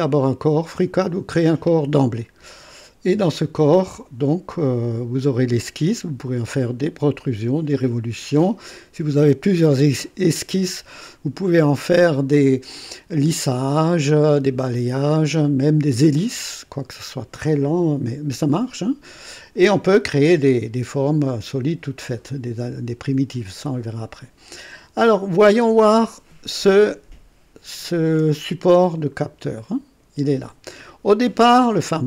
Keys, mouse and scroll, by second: 27.9 click, 29.1-29.5 scroll up 2.